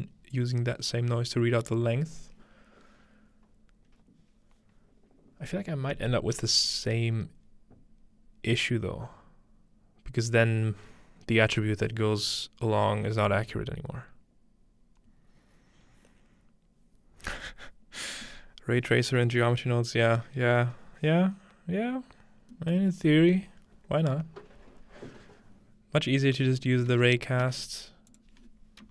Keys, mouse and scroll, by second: 22.8-26.1 middle drag, 26.1-28.1 scroll up 2, 26.7-28.1 shift+middle drag, 26.9-27.6 typing, 28.1-28.9 shift+drag.